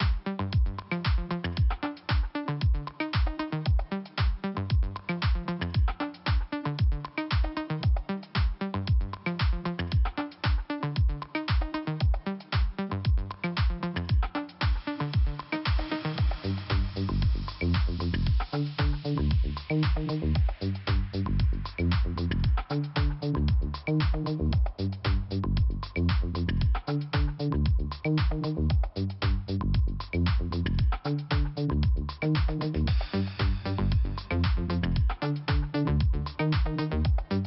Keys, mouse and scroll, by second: 0.9 click, 1.0 click, 2.4-3.2 scroll down 2, 6.2 click, 7.8 click, 7.9 click, 9.4 middle click, 13.9 middle click, 15.0 click, 15.6 click, 26.9 ;, 28.0 click, 28.9 click, 29.5 click, 29.7 Return, 30.6 click, 31.2 click, 31.3 click, 32.2 click, 32.4 click, 32.5 click.